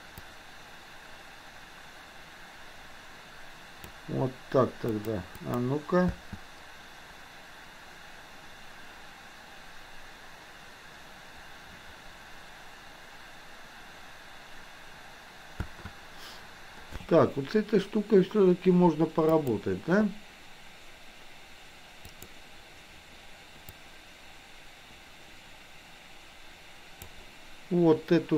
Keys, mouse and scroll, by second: 0.2-3.8 drag, 5.5 click, 6.1 space, 15.5 space, 19.3 click, 22.1 click, 23.7-27.2 drag.